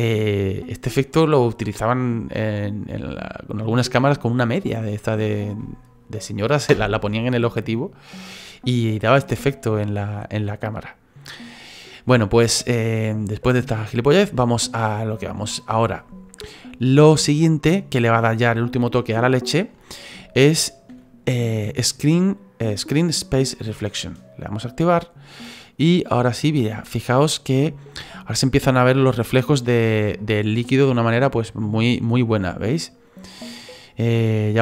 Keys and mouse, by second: 0.6 middle click, 9.6 middle click, 14.4 middle click, 15.4 middle click, 17.2 middle click, 19.2 shift+middle click, 19.8 middle click, 20.2 shift+middle click, 24.9 click, 25.8 middle click, 28.0 shift+middle click, 28.6 middle click, 30.5 middle click, 32.7 click, 33.0 click, 33.5 click.